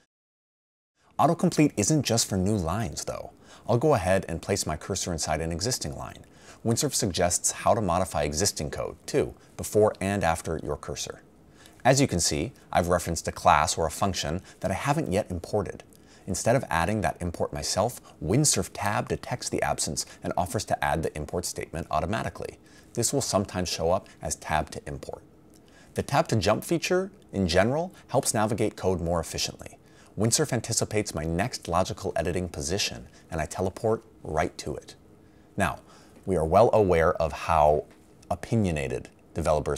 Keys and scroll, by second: 20.3 Tab, 23.2 Tab, 31.5 Tab.